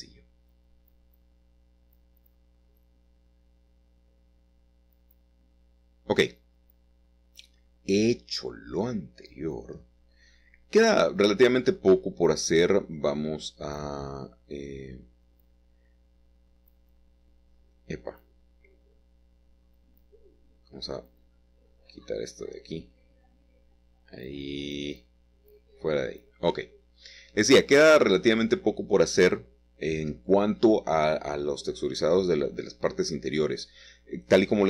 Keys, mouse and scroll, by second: 1.3 shift+middle click, 2.6-3.4 scroll down 1, 3.4-5.6 shift+middle drag, 5.5-5.8 scroll up 2, 6.4 click, 11.6-13.0 scroll down 2, 15.5-17.4 middle drag, 17.6-21.0 drag, 21.0-22.9 middle drag, 22.9-24.2 scroll up 2, 24.2-24.6 scroll up 1, 25.1-26.3 scroll down 3, 26.3-27.5 scroll down 1, 27.5-29.0 scroll up 2, 30.1-32.2 drag, 32.7 click, 33.1 middle click, 33.9 middle click.